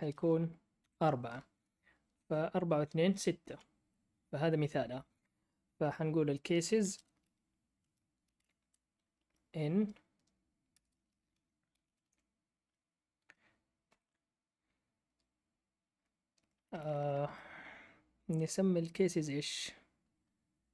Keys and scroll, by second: 0.5-1.3 typing, 3.4 Down, 6.8 space, 8.0-9.6 typing, 10.7 Return, 11.0-12.5 typing, 13.6-14.3 typing, 16.5-17.4 typing.